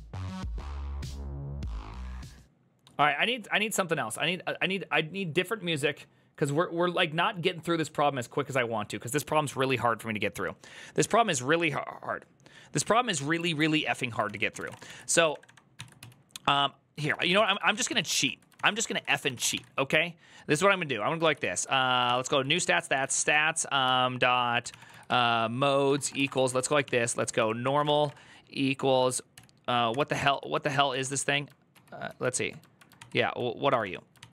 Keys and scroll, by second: 13.2 alt+{, 14.0 ctrl+c, 14.1-19.6 typing, 20.9-31.3 typing, 30.0 ctrl+c, 31.5 ctrl+k, 31.8 ctrl+j, 33.2-33.9 typing, 34.0 ctrl+c, 34.1 ctrl+u.